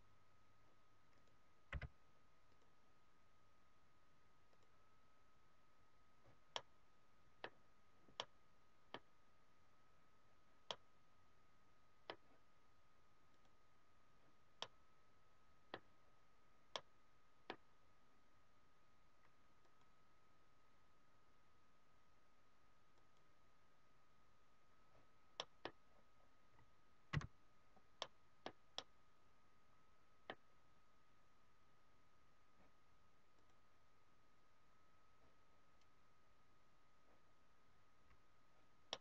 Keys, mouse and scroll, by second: 6.5 middle click, 8.1 middle click, 10.7 middle click, 13.3 click, 14.6 middle click, 16.2-16.5 scroll up 3, 16.7 middle click, 17.5 scroll down 2, 24.0 click, 25.4 middle click, 25.8-26.2 scroll up 3, 27.0 z, 27.5 scroll up 2, 27.9 middle click, 28.3 scroll down 2, 28.7 middle click, 34.2 click, 38.9 middle click.